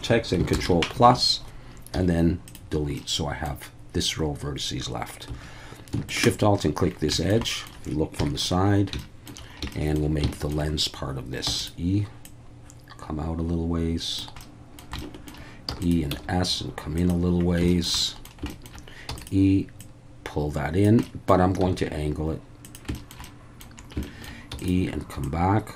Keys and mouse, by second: 0.5 ctrl+KP_Add, 1.9 x, 3.0 middle click, 5.3 2, 6.1 alt+shift+click, 7.1 shift+middle click, 7.5 middle click, 8.2 KP_3, 9.0 shift+middle click, 9.7 shift+middle click, 10.3 shift+middle click, 11.5 e, 11.6-14.2 drag, 14.5 middle click, 15.0 shift+middle click, 15.7 e, 15.8 click, 16.1 s, 17.0 click, 17.7 shift+middle click, 18.0 middle click, 18.5 shift+middle click, 19.1 e, 19.2 click, 19.8-20.8 drag, 21.1 middle click, 21.6 s, 22.6 click, 23.0 shift+middle click, 23.3 middle click, 24.1 shift+middle click, 24.5 e, 24.6-25.7 drag.